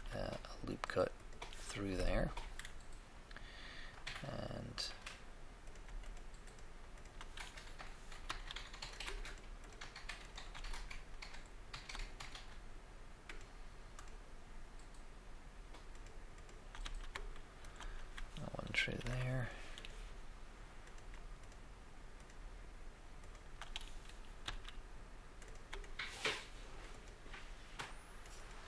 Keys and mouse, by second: 2.5-4.5 middle drag, 5.6-7.4 right drag, 8.3 f, 11.7 click, 13.4 shift+right click, 16.8 f, 16.8 f, 17.4 middle click, 18.9 ctrl+r, 19.0 ctrl+r, 20.8 click, 22.4-24.4 shift+right drag, 24.4 f, 24.6 f.